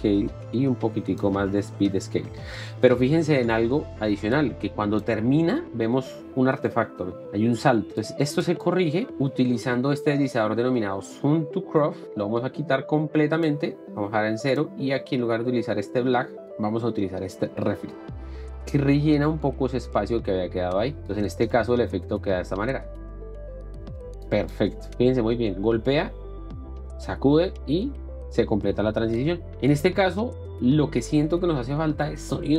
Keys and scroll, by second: 7.2 space, 22.5 space.